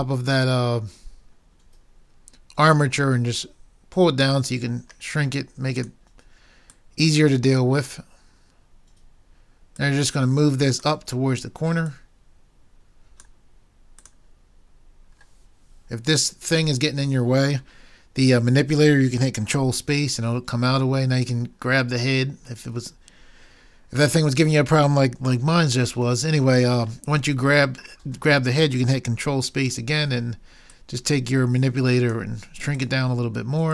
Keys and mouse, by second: 2.8 click, 4.1 click, 4.6-5.8 middle drag, 5.8-7.9 drag, 19.8 ctrl+space, 29.5 ctrl+space, 30.7-31.9 drag.